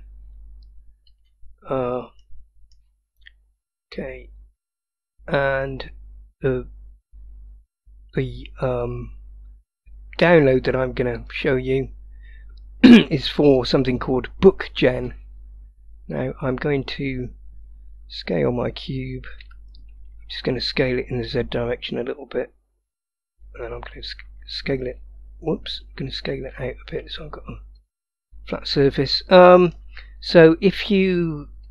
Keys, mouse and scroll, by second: 1.2 click, 2.2-2.8 middle drag, 4.8-7.1 drag, 8.8 click, 11.2 click, 16.2 click, 19.5 s, 29.0-29.8 middle drag.